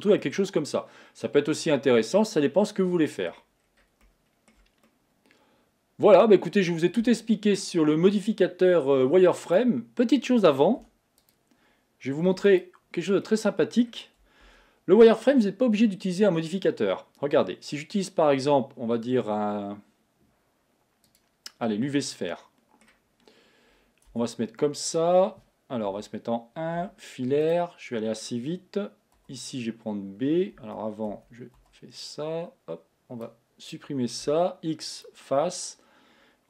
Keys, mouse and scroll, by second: 0.3-3.3 middle drag, 3.7-4.1 scroll down 2, 4.1-6.8 middle drag, 6.8-7.7 scroll up 1, 7.7 scroll down 2, 9.6 click, 10.9 s, 12.3 x, 13.3-14.6 middle drag, 14.6 shift+a, 21.9 scroll down 2, 22.3 middle click, 23.2 scroll up 2, 24.2 Tab, 24.7-26.0 middle drag, 26.0 KP_1, 26.9 z, 31.1 a, 31.7 b, 34.3 x.